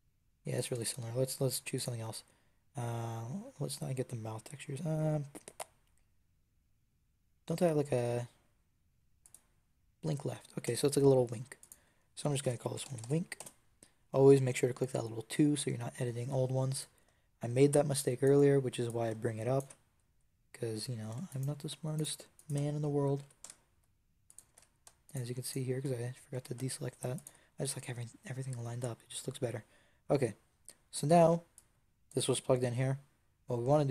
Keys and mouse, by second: 0.4 click, 0.6 Tab, 10.5 Tab, 11.5-13.4 drag, 16.7-23.1 drag, 23.1 g, 24.2 click, 24.6 ctrl+z, 26.2 g, 29.5 middle click, 31.4 click.